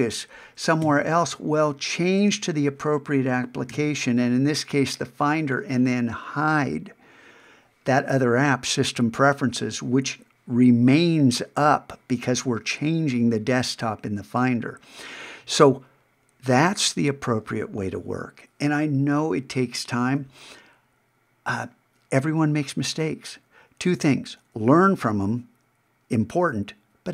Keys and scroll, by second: 0.8 super+Tab, 3.7 alt+super+h.